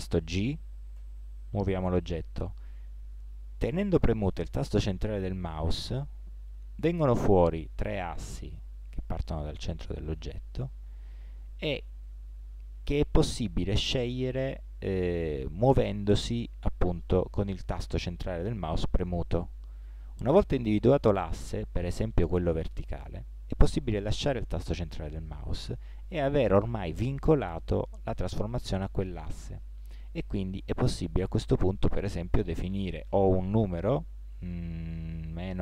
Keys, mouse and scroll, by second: 0.9 g.